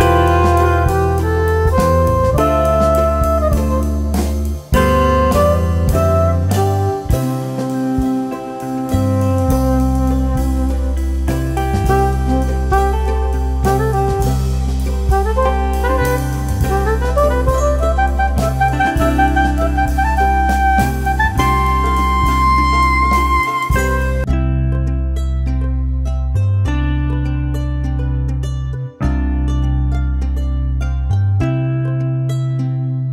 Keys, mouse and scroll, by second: 1.1-3.3 drag, 3.3 right click, 4.1 ctrl+z, 4.5 click, 7.5 scroll up 1, 8.5-14.0 drag, 14.0 space, 14.5-18.0 drag, 18.0 shift+Page_Up, 19.5 click, 22.4 right click, 23.6 click, 25.7-26.6 typing, 26.7 click, 27.1 F3, 27.7 F2, 28.0-33.1 drag.